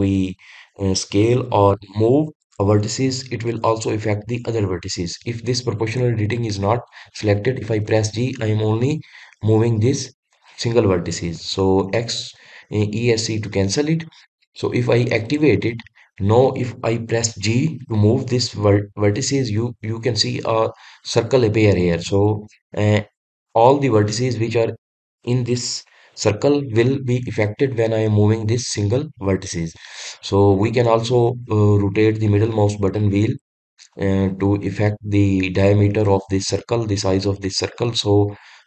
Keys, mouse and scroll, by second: 15.6 click.